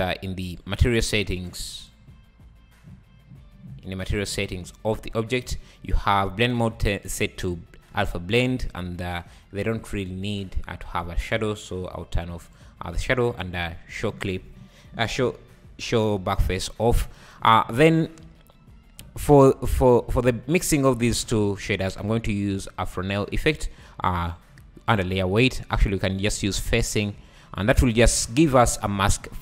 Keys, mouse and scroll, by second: 3.1 click, 4.0-4.5 scroll down 7, 5.4-13.4 drag, 17.5 scroll down 3, 17.7 shift+a, 21.4 shift+a, 26.2-29.4 drag.